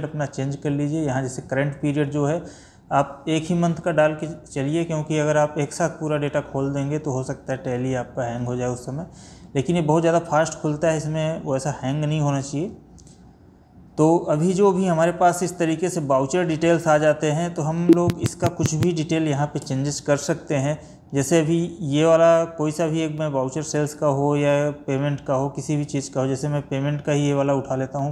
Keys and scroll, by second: 11.9 Down.